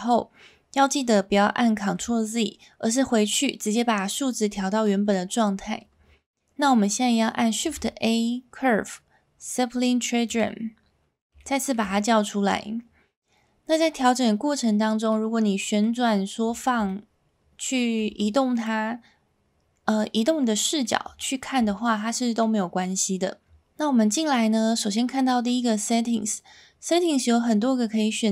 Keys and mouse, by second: 7.6 shift+a, 11.4-11.7 shift+middle drag, 15.1-15.8 middle drag, 16.9-18.0 shift+middle drag, 18.5-20.8 middle drag, 21.2-21.5 shift+middle drag, 22.4-22.8 middle drag.